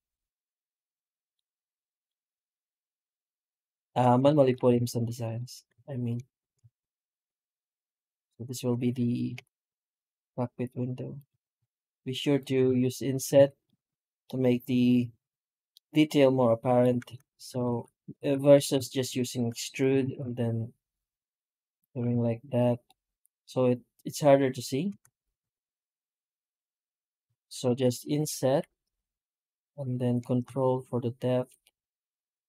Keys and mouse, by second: 0.0-1.2 middle drag, 1.9-2.4 middle drag, 2.7 right click, 3.7 Tab, 4.1 shift+middle drag, 4.6 alt+a, 5.1 right click, 6.1 ctrl+shift+right click, 7.0 i, 9.2 i, 11.2 alt+s, 12.5 Tab, 13.2 alt+a, 13.5-14.0 middle drag, 14.1 middle click, 15.6-16.2 middle drag, 16.2 middle click, 16.6 middle click, 17.0 ctrl+z, 17.2 ctrl+z, 17.5 ctrl+z, 18.1 ctrl+z, 18.7 shift+middle drag, 19.4 e, 19.9 alt+s, 22.0 Tab, 22.7-23.3 middle drag, 24.7 Tab, 25.3 ctrl+z, 25.5 ctrl+z, 25.7 ctrl+z, 26.4-27.1 middle drag, 27.3 shift+middle drag, 27.6 middle click, 28.3 i.